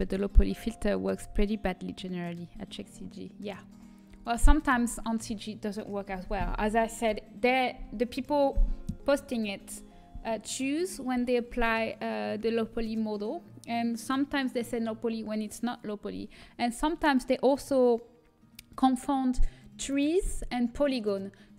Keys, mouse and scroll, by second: 2.6-5.4 middle drag, 4.0 a, 5.4 a.